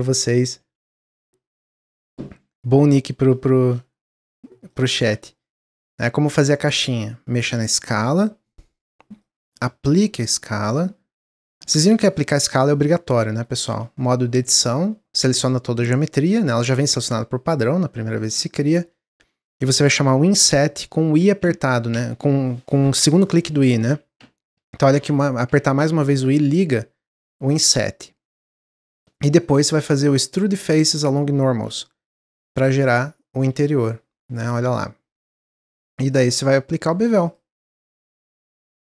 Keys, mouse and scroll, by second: 0.2 click, 0.6 shift+a, 1.9 middle click, 2.1-2.8 scroll down 1, 2.8 click, 3.4 shift+middle click, 4.3 click, 4.8 shift+middle click, 5.5-6.0 scroll up 1, 7.4 click, 9.8-12.8 drag, 13.6 Tab, 16.4-20.2 middle drag, 20.2 typing, 29.9-33.0 drag, 33.7-35.9 middle drag, 35.9 click, 37.2 click, 38.7 click.